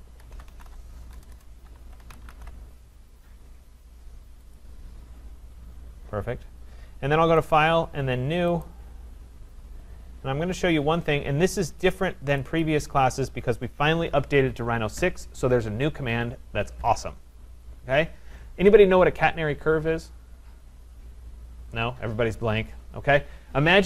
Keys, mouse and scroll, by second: 0.0-2.8 typing, 4.6 click, 4.6 typing, 7.6 click, 8.7 click, 12.4 click, 12.6 click.